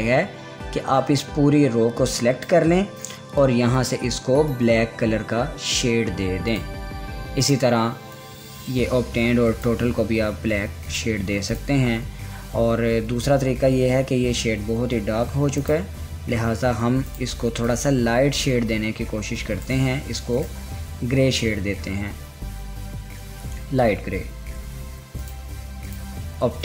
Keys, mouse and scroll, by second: 7.1-11.5 drag, 14.2 ctrl+z, 16.2-20.9 drag, 25.8-26.6 drag.